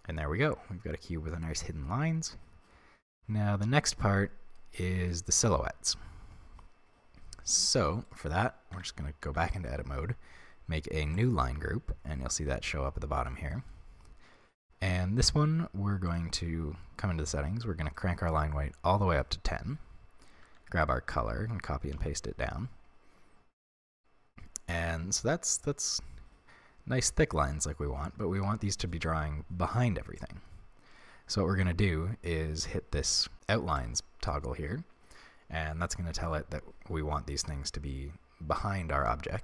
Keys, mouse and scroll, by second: 8.0 right click, 8.7 Tab, 9.3 a, 11.1 click, 13.1 Tab, 13.4-16.0 middle drag, 16.0 drag, 16.4-17.9 scroll down 1, 17.9-23.7 drag, 20.4 ctrl+c, 23.7-33.8 middle drag, 33.8 click.